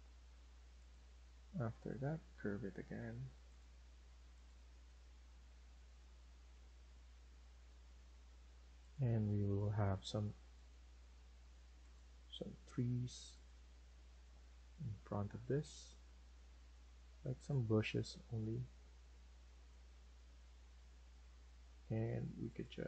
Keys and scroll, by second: 9.6 Escape.